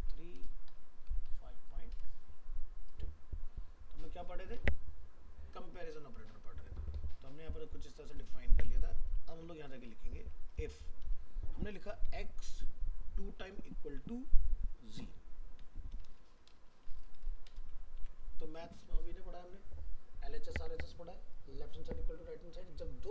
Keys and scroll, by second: 18.0 ctrl+s.